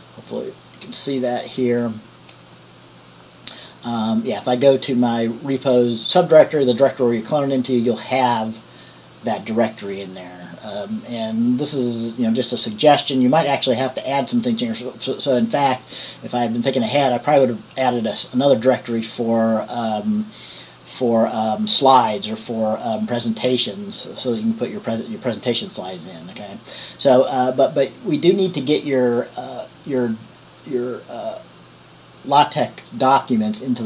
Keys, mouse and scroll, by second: 6.4-7.6 drag, 8.4-26.4 drag, 26.6 click.